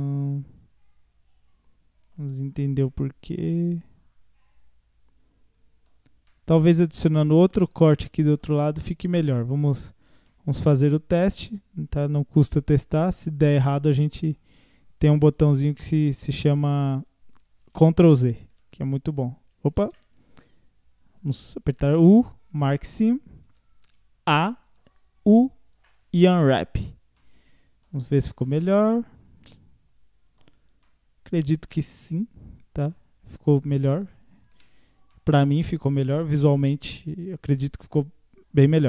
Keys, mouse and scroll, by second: 2.3-2.9 scroll down 1, 2.9-5.9 middle drag, 6.0 scroll down 3, 6.3-8.7 middle drag, 8.7-9.5 scroll up 1, 9.5 alt+click, 10.3-11.3 middle drag, 11.3-11.7 scroll up 1, 12.5 shift+click, 13.6 shift+click, 14.5 shift+click, 15.3 shift+click, 16.1 shift+click, 18.5 a, 19.8 ctrl+z, 21.7 u, 23.1 scroll down 1, 23.5 a, 24.7 u, 27.2 middle click, 28.1-28.5 scroll up 1, 28.5-30.5 middle drag, 30.5-30.9 scroll down 1, 30.9-34.6 middle drag, 34.6 Tab, 34.8-35.1 scroll down 1, 35.1-37.6 middle drag, 37.6-38.3 scroll up 4, 38.3-38.7 scroll up 2.